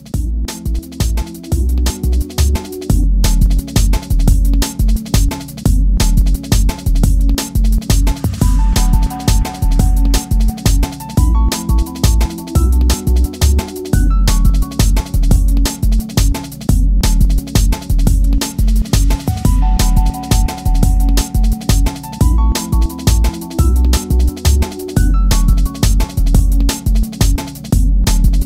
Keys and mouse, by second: 0.5 0, 3.8-6.1 drag, 5.5 0, 7.2-9.2 drag, 8.7 0, 12.7 ctrl+z, 13.8-14.9 drag, 15.5-17.4 drag, 19.0-21.7 drag, 21.5 Tab, 23.0-24.4 drag, 24.5 Tab, 25.6-27.5 drag, 26.9 Tab.